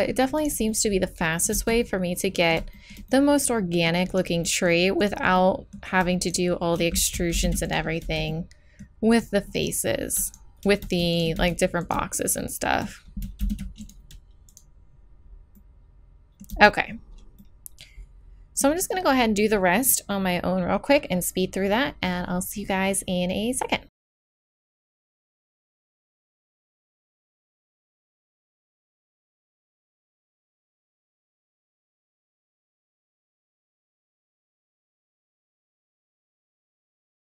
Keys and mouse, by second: 0.4 right click, 0.8 click, 1.0 click, 1.5 z, 4.1 middle click, 7.1 click, 7.4 alt+m, 8.0 z, 9.1 right click, 9.5 middle click, 9.6 middle click, 11.4 z, 13.4 alt+m, 13.5 right click, 14.5-16.0 right drag, 16.0 middle click, 16.2 middle click, 16.5 z, 23.8 middle click, 24.2-32.2 typing, 24.5 middle click, 25.4 right click, 27.0 right click, 27.4 click, 28.9 right click, 29.8 right click, 30.2 right click, 31.7 alt+m, 32.0 right click, 32.5 right click, 32.7 alt+m, 33.1 right click, 33.4 f, 33.6 alt+m, 33.7 click, 34.0 alt+m, 34.1 click, 34.2 z, 34.4 z, 34.8 alt+m, 35.1 z, 35.6 right click, 35.8 middle click, 36.0 right click, 36.1 middle click, 36.2 right click, 36.3 middle click, 36.4 middle click, 36.6 middle click, 37.0 z, 37.1 z.